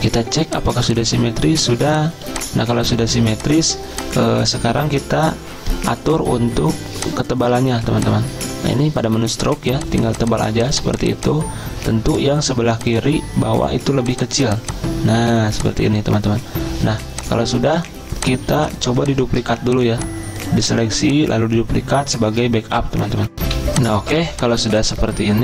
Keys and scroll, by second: 0.4 z, 2.8 v, 18.5 z, 19.5 v, 23.4 z.